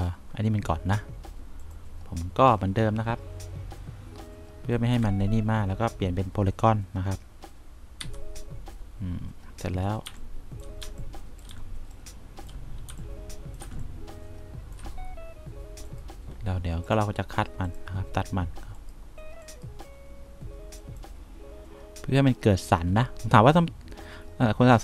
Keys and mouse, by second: 5.3 F1, 8.3 c, 10.3 3, 11.1 1, 11.8 2, 13.2 3, 13.9 1, 19.7 right click, 21.1 click.